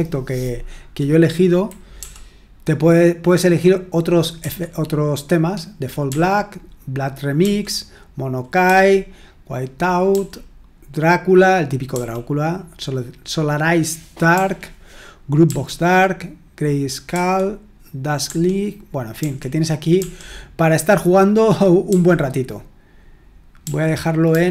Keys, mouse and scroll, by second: 1.9 Right, 6.1 Right, 7.4 Right, 10.1 Right, 11.9 Right, 14.3 Right, 15.4 Right, 17.1 Right, 18.2-19.1 typing, 19.9 Right, 24.3 typing.